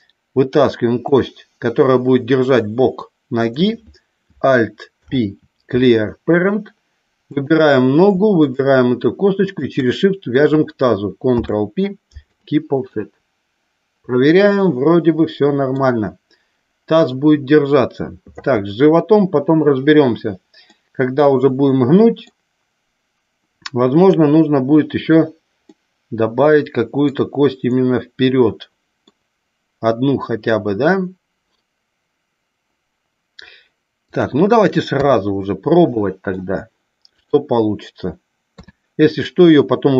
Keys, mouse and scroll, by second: 1.0 click, 4.9 alt+p, 7.3 click, 8.4 shift+click, 11.3 ctrl+p, 12.9-15.7 middle drag, 20.7-22.3 middle drag, 25.8-27.0 middle drag, 27.7-29.0 middle drag, 34.1 click, 35.0 KP_3, 35.9 middle click, 38.5 KP_3.